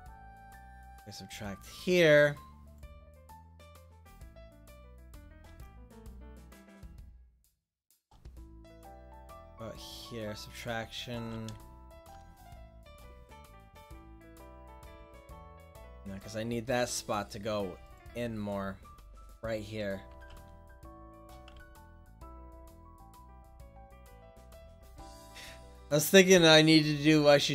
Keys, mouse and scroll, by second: 3.0-4.4 middle drag, 6.7-8.0 drag, 10.3-11.4 drag, 11.4 ctrl+z, 14.6-17.3 middle drag, 17.3-20.3 drag, 20.3 ctrl+z, 21.8 ctrl+z.